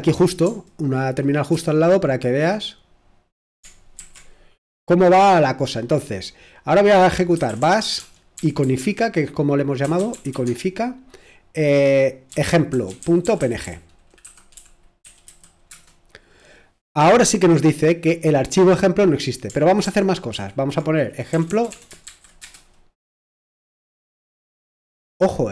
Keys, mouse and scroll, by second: 1.5 ctrl+Return, 4.0 ctrl+t, 7.1-8.6 typing, 8.8 Tab, 9.7-10.8 typing, 12.0-17.2 typing, 19.8 ctrl+o, 21.3 BackSpace, 21.5 BackSpace, 21.7 BackSpace, 22.1 shift+8, 22.4 Return.